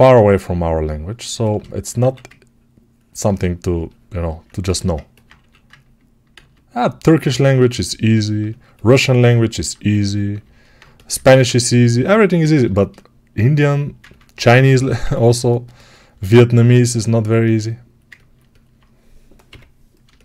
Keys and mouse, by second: 4.3-13.5 ctrl+alt+shift+drag, 6.2 ctrl+z, 13.5-20.2 right drag.